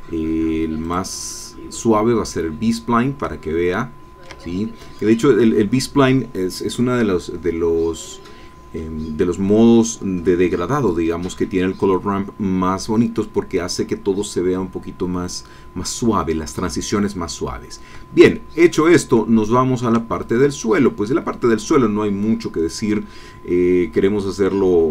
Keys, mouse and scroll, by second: 0.8 click, 3.5 ctrl+middle click, 18.3-20.0 shift+middle drag, 20.2 shift+click.